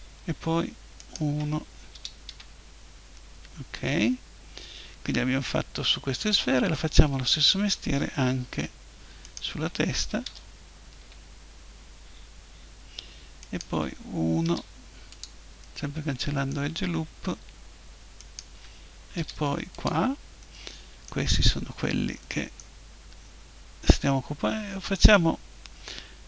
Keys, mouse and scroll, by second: 1.0-2.8 right drag, 1.9 Delete, 3.1-5.0 drag, 7.0-8.8 middle drag, 9.3-11.0 right drag, 10.3 Delete, 13.4-15.2 right drag, 14.5 Delete, 18.2-19.2 right drag, 19.2 Delete, 20.2 right click, 20.4-22.3 drag, 22.3-26.2 middle drag.